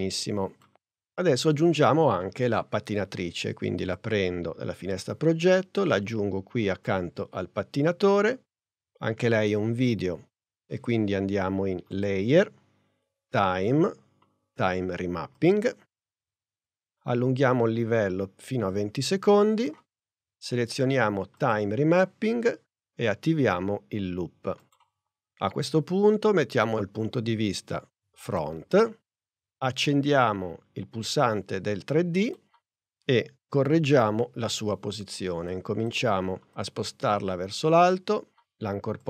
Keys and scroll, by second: 33.8 p.